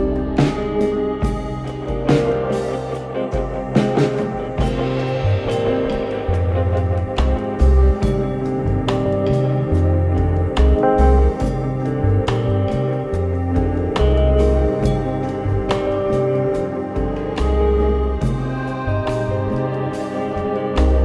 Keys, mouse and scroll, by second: 3.3 Tab, 4.4 click, 5.1 click, 5.6 Tab, 6.5 alt+click, 8.1 drag, 8.8 click, 9.4-9.9 drag, 10.0-10.3 drag, 10.5-13.3 drag, 15.7 Tab, 16.7-17.4 scroll down 1, 17.8 click, 18.7 click, 19.3 shift+a.